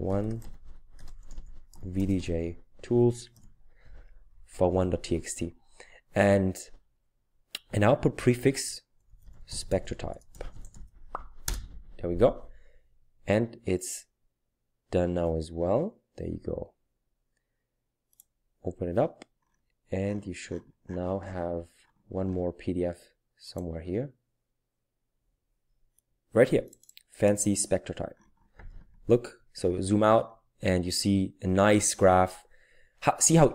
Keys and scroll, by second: 0.4-3.7 typing, 5.1 typing, 8.8-11.2 typing, 11.5 Return, 13.3 typing.